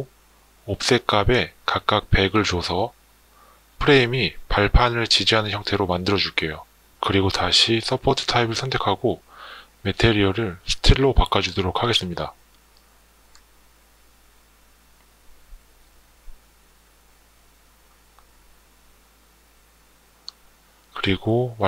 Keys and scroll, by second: 0.8 1, 1.1 0, 9.9 s, 10.6 t, 11.1 l.